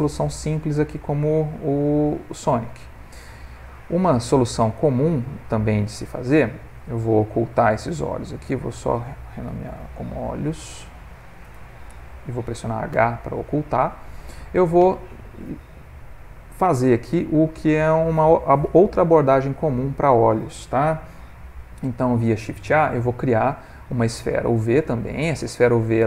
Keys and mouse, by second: 1.1 ctrl+middle click, 2.7 click, 3.5 ctrl+middle click, 3.7 ctrl+middle click, 3.9-4.3 shift+middle click, 4.1 ctrl+middle click, 4.8 ctrl+middle click, 5.9 click, 8.4 click, 8.5 click, 12.9 h, 13.7 ctrl+middle click, 22.9 shift+a.